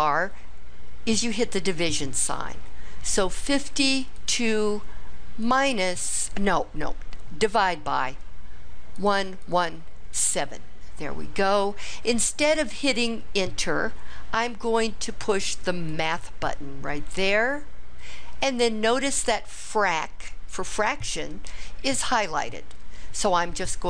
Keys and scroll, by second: 3.2 5, 4.2 2, 5.4 /, 8.9 1, 9.4 1, 10.7 7.